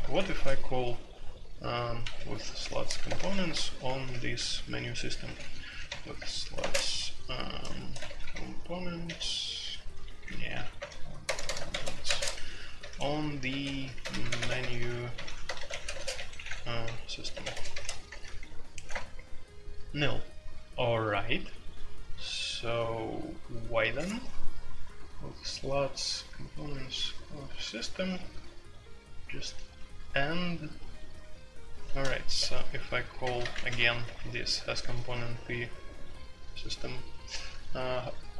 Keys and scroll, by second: 0.0 typing, 2.0-6.5 typing, 6.1 Return, 7.7-9.0 typing, 10.7-16.1 typing, 17.3-19.4 typing, 32.3 typing, 33.5 alt+p, 33.7 alt+p, 34.0 alt+p.